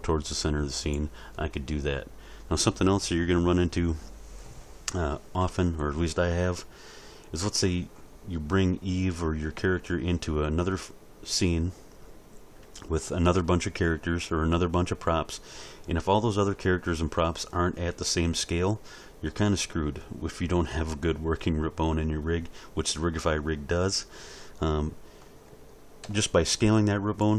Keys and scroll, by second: 26.0 s.